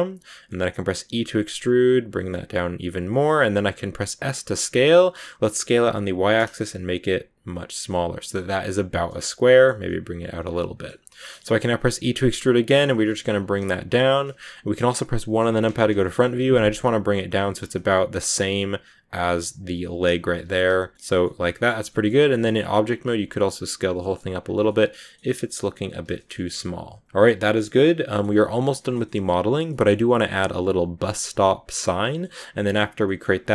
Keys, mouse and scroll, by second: 1.0 e, 3.0 middle click, 3.5 s, 7.8-9.3 middle drag, 9.3 s, 10.4 middle click, 10.8 scroll down 1, 10.8 scroll up 1, 10.9 scroll down 1, 11.1 middle click, 11.4-11.8 scroll down 2, 11.8 e, 12.8 scroll down 2, 12.9 middle click, 13.2 g, 15.3 KP_1, 15.9 shift+middle click, 16.1 scroll up 1, 17.3 g, 20.9 Tab, 20.9 scroll down 2, 21.1 middle click, 21.7-22.7 scroll up 2, 21.8 middle click, 22.7 s, 24.4 scroll down 2, 24.6 middle click, 25.2 s, 26.0-27.3 shift+middle drag, 27.3 ctrl+s, 27.5-33.5 middle drag.